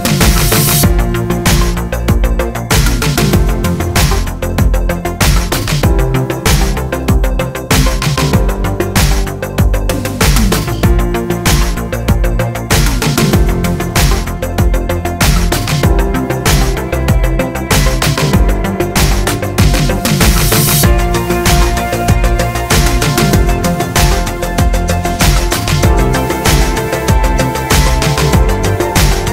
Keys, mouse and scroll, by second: 0.0-4.2 middle drag, 4.2 click, 4.5 alt+d, 5.6 click, 5.7 r, 6.4 click, 6.7 alt+d, 7.2 click, 7.3 r, 8.3 click, 8.7 alt+d, 9.4 click, 11.0 r, 11.1 click, 11.3 alt+d, 11.9 click, 12.1 r, 12.8 click, 12.8 s, 14.4 click, 14.7 s, 16.1 alt+d, 16.8 click, 17.2 r, 18.1 click, 20.0 click, 21.3 click, 21.7 alt+d, 22.5 click, 22.6 r, 23.0 click, 23.1 s, 24.3 click, 24.6 alt+d, 25.2 click, 25.3 s, 26.4 click, 27.3 click, 28.1 click, 28.8 click.